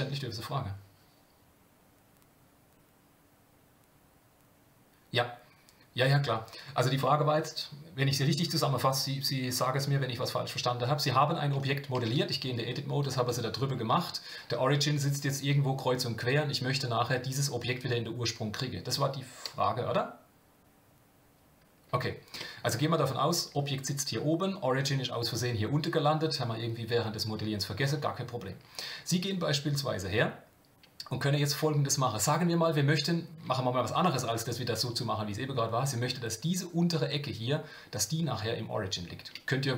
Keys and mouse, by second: 12.0 Tab, 12.4 g, 22.4 Tab.